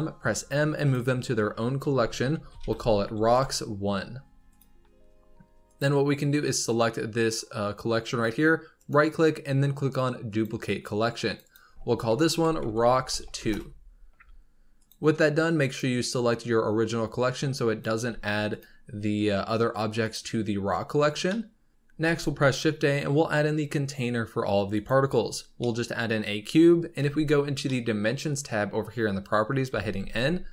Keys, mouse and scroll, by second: 0.1 m, 5.6 click, 6.4 click, 8.7-11.2 right drag, 11.2 click, 11.4-12.8 drag, 12.8 BackSpace, 12.9 BackSpace, 13.1 BackSpace, 14.7 click, 15.6 click, 17.5 click, 18.0 g, 19.9 click, 21.2 shift+middle click, 22.0 shift+a, 25.5-26.2 middle drag, 26.2 scroll up 3, 26.9 n, 27.6-29.6 shift+middle drag, 29.6 n, 29.9 n.